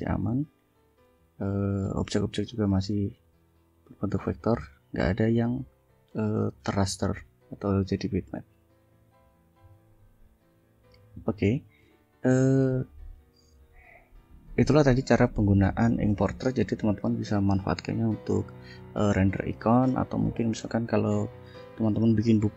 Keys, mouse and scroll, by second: 0.0 ctrl+click, 0.9 ctrl+click, 2.0 ctrl+F2, 2.5 click, 3.1 click, 3.9 click, 4.6 click, 5.0 click, 7.0 F1, 7.3 click, 8.7 click, 11.1 click, 11.6 click, 13.2 click, 14.5 click, 18.4 click, 19.0 click.